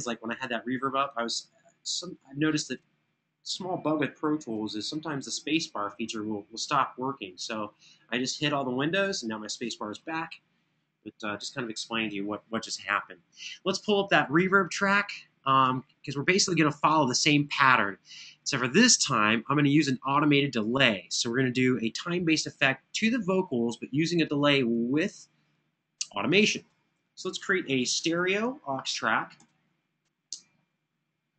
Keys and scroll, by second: 27.4 shift+super+n, 28.2 super+Right, 29.2 super+Down, 30.1 Return.